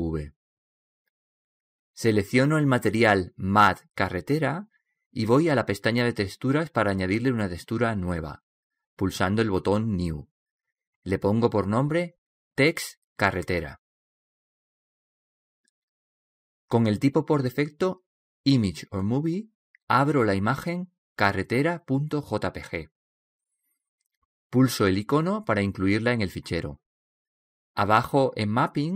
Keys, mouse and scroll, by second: 0.3-2.2 drag, 2.5-2.9 scroll up 1, 3.6-5.5 drag, 6.4-9.8 drag, 10.4-13.1 drag, 22.7 click, 24.2-26.0 drag, 27.2-28.9 drag.